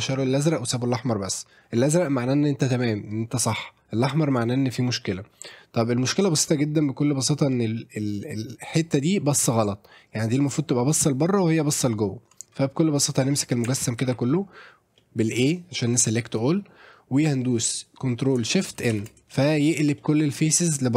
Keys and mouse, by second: 5.7 click, 6.2-6.5 middle drag, 7.5 middle drag, 12.6 middle drag, 13.7 Tab, 14.0 a, 15.0 middle click, 18.9 ctrl+shift+n, 20.0 middle click.